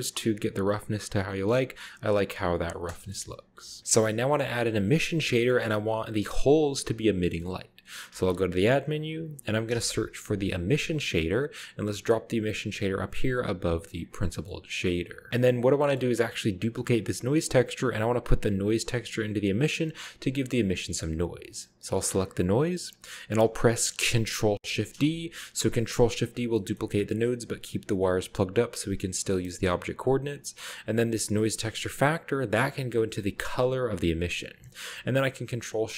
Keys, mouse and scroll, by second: 0.2-2.1 middle drag, 0.3-1.5 scroll down 1, 2.3-3.2 scroll down 1, 3.2 KP_0, 3.8 ctrl+b, 3.8-4.8 scroll down 2, 4.3 click, 5.4-6.0 shift+scroll up 1, 5.5-6.2 shift+middle drag, 7.3-8.1 middle drag, 8.2 shift+a, 8.9 click, 9.7 typing, 11.0 click, 11.4 click, 12.9 click, 13.7 click, 14.3 middle click, 14.6-15.3 scroll up 1, 15.9-16.6 middle drag, 16.4 click, 20.5 click, 21.9 click, 24.6 ctrl+d, 26.2 click, 26.4-27.5 middle drag, 26.8-27.7 scroll down 2, 27.5 g, 27.7 click, 28.0-28.8 drag, 29.1 a, 29.3-30.0 middle drag, 29.5-30.1 scroll up 1, 30.1-31.2 drag, 31.7-33.9 drag, 35.7 ctrl+shift+click.